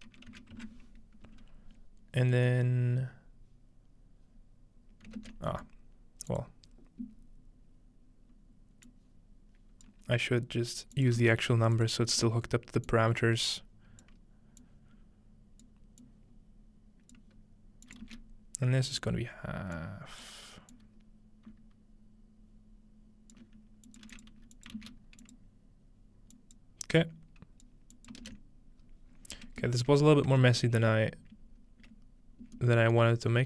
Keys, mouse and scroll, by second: 2.3-4.9 middle drag, 3.2-4.9 scroll down 1, 5.2 ctrl+space, 5.7 middle click, 6.3 ctrl+click, 6.8 scroll down 2, 7.2 scroll up 2, 8.9-9.9 drag, 11.0 shift+click, 11.2 shift+d, 11.9 click, 14.6-20.3 drag, 18.0 shift+d, 20.7-23.4 drag, 23.9 click, 24.1-24.8 typing, 24.2 click, 24.4-24.8 drag, 25.2 click, 27.0 click, 28.0 click, 28.2 ctrl+click, 28.8-31.1 scroll down 4, 29.8-32.3 shift+middle drag, 31.6 scroll up 2, 33.0-33.4 shift+middle drag, 33.2 scroll up 1.